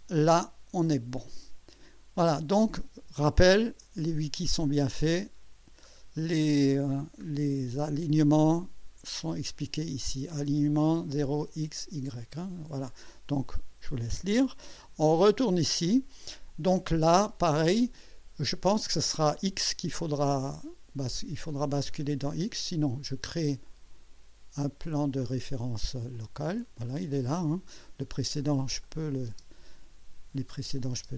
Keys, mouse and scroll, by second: 1.3 click, 2.1 scroll down 1, 2.3 scroll up 1, 3.8 click, 5.4-5.7 scroll up 1, 5.9-7.3 scroll down 5, 15.1 click, 16.3-17.4 drag, 17.6-17.9 scroll down 2, 18.0 right click, 21.9 click, 23.6 click, 26.1 click, 26.8-27.6 drag, 28.8 click, 29.3 space, 30.5 click, 30.9 space.